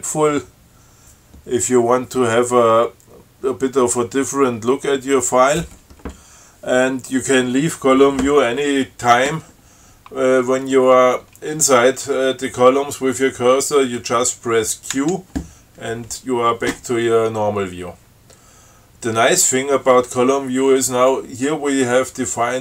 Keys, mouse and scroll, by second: 15.2 q.